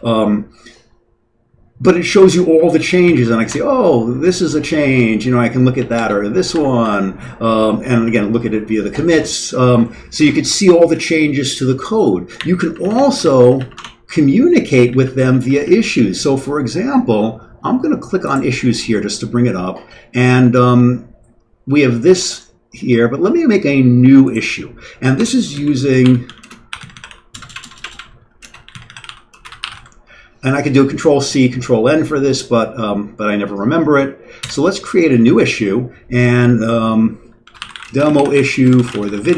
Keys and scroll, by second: 3.1 Down, 3.5 Return, 3.5 \, 5.1-7.0 typing, 7.5 Down, 7.9 Up, 8.0 Up, 12.7 Down, 12.8 Down, 12.9 Down, 13.2 Down, 13.5 Down, 13.7 Tab, 14.8 Down, 15.1 Down, 15.6 Up, 15.9 Up, 25.2 Escape, 25.3-30.2 typing, 34.4 Return, 37.1-39.3 typing.